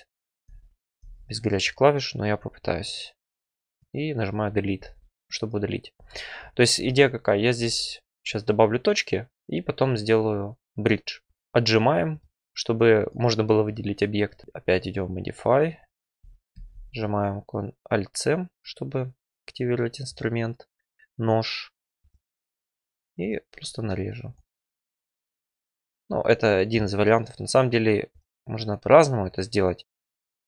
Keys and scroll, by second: 3.5 Delete, 14.4 alt+c, 16.4 alt+c.